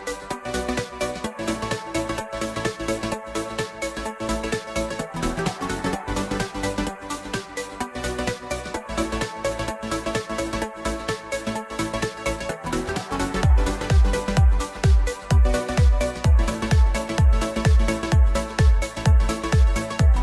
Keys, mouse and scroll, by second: 0.3 KP_1, 0.9 drag, 1.2 Tab, 1.5 z, 1.9 click, 2.6 b, 3.2 s, 8.6 click, 8.8 b, 9.4 s, 12.3 click, 12.6 z, 13.2 click, 13.6 scroll down 1, 13.8 click, 14.1 s, 15.6 KP_1, 16.1 click, 17.1 click, 17.4-18.2 middle drag, 18.2 KP_0, 18.7 z, 19.6 z.